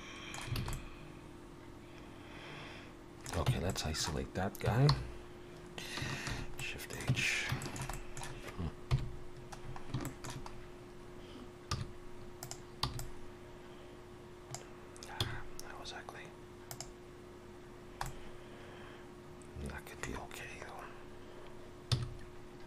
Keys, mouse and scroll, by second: 0.6 alt+a, 0.7 middle click, 3.5 Tab, 3.7 middle click, 4.9 alt+h, 6.3 shift+h, 6.6 middle click, 7.1 Tab, 7.6 shift+middle click, 7.9 middle click, 8.9 KP_7, 9.6-10.0 scroll up 4, 10.0 shift+middle click, 10.5 scroll up 2, 11.7 z, 12.8 b, 15.2 x, 17.7-18.0 scroll down 1, 18.0 middle click, 21.9 z.